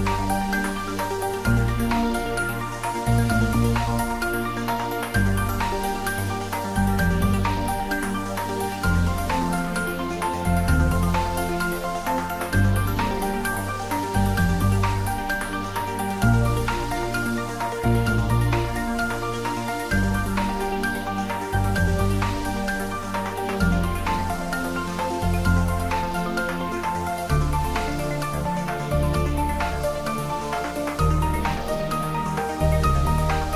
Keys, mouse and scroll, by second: 2.5 click, 5.4-7.3 scroll down 1, 7.7-8.2 scroll down 1, 9.3 shift+d, 13.3 click, 14.1 s, 16.3 click, 16.9-19.5 middle drag, 19.5-21.8 scroll up 1, 23.3 click, 24.8-26.2 typing, 27.0 Return, 28.4-30.1 scroll up 1, 33.2 click.